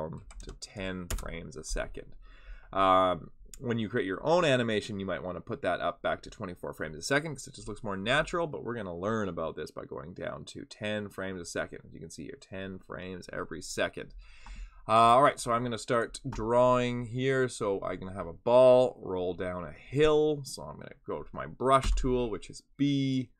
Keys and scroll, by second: 21.8 b.